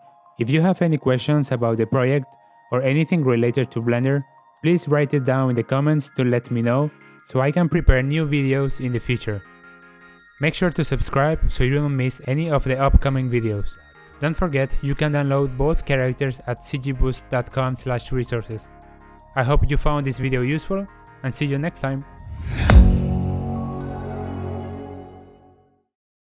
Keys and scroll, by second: 4.4 g.